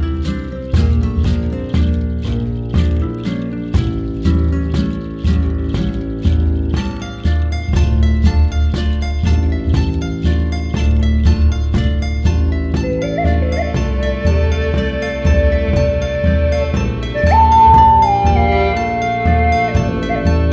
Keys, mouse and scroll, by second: 1.6 click, 2.7 click, 3.5 click, 4.9 ctrl+s, 5.7 drag, 6.7-7.7 scroll up 6, 7.7-8.7 drag, 9.6-10.2 scroll down 6, 10.2-13.5 middle drag, 13.5-14.4 scroll up 4, 14.4-15.3 scroll down 6, 15.3-16.4 middle drag, 16.4 KP_0, 17.0 click, 17.3 ctrl+s, 18.1 click, 18.3 scroll down 2, 18.5-19.1 scroll up 1, 19.1-19.5 scroll up 1, 20.1 click.